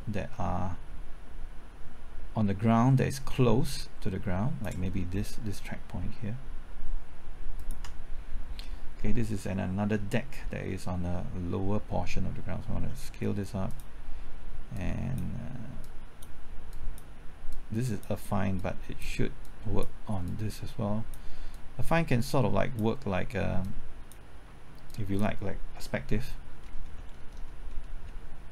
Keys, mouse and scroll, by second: 7.5 ctrl+click, 8.9 scroll down 1, 9.2 middle click, 12.7 s, 13.6-26.1 drag, 26.5-26.9 scroll up 1, 26.9 middle click, 27.2-27.8 scroll up 1, 27.8 middle click.